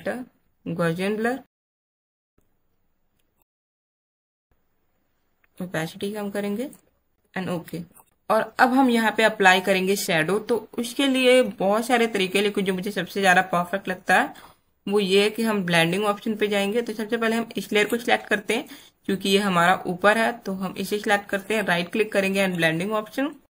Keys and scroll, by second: 8.0 space.